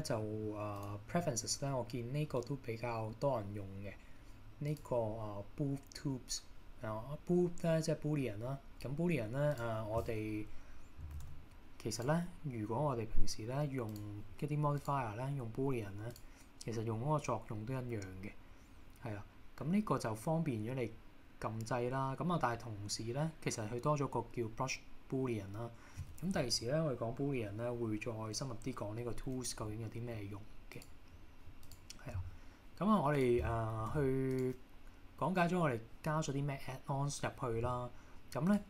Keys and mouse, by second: 0.0-1.2 drag, 11.2 shift+d, 12.0 click, 14.9-16.3 drag, 30.8 click, 31.7 click, 33.3 click, 34.0 x, 38.5 click.